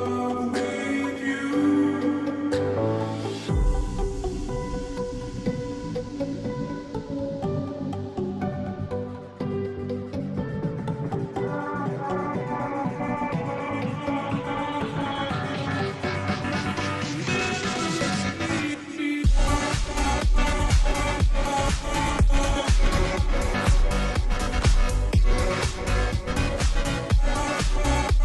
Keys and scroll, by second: 1.9 ctrl+t, 8.8-9.4 space, 10.1 space, 13.2 Return, 13.2 space.